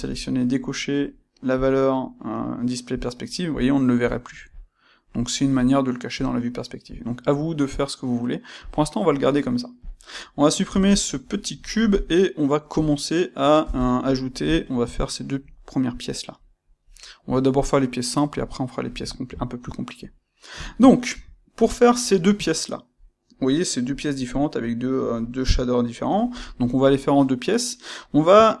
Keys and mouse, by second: 1.5 click, 2.9 click, 3.5 click, 4.0 click, 4.4 click, 8.6 click, 9.8 click, 11.2-28.6 middle drag, 13.5 KP_1.